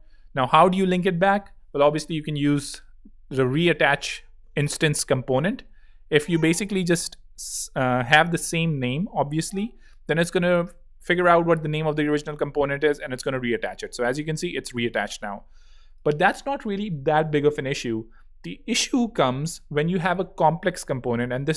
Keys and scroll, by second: 2.5 super+p, 3.3 super+r, 3.4 e, 3.7 a, 13.0 Return, 20.9 super+x, 21.4 super+space.